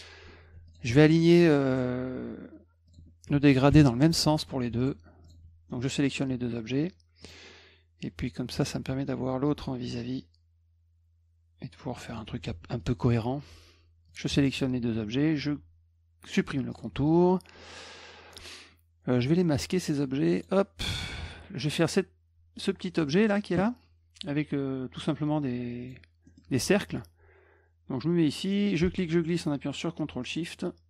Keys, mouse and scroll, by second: 0.7 shift+click, 1.7 click, 2.9 click, 3.3 F1, 4.2 F2, 4.8 click, 5.2 shift+click, 5.7 middle click, 7.2 click, 8.5-12.2 drag, 12.6 F1, 12.8 click, 14.1 click, 14.4 shift+click, 16.2 middle click, 16.7 click, 17.1 middle click, 19.8 click, 20.4 click, 21.1 middle click, 23.0 middle click, 23.1 middle click, 25.8 click, 26.3 middle click, 28.8-30.8 ctrl+shift+drag.